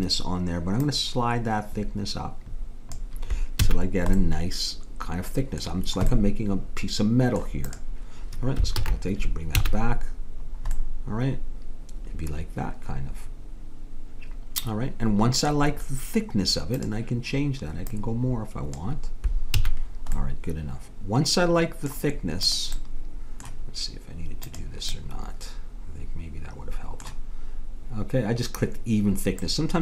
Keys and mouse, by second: 0.9-2.6 drag, 3.7 a, 7.7-8.8 drag, 8.8 alt+h, 9.5 a, 16.7-19.8 drag, 19.6 a, 19.9-21.2 middle drag, 22.5 click, 26.3 middle click, 29.5-29.8 middle drag.